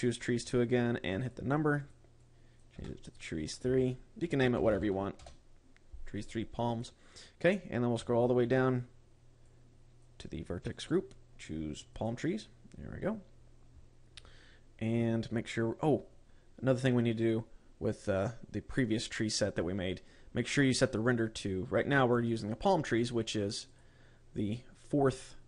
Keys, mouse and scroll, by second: 2.3 click, 7.2 click, 7.9-9.3 scroll down 14, 9.9 click, 11.2 click, 13.4-16.2 scroll up 16, 16.2 scroll up 2, 24.2 click.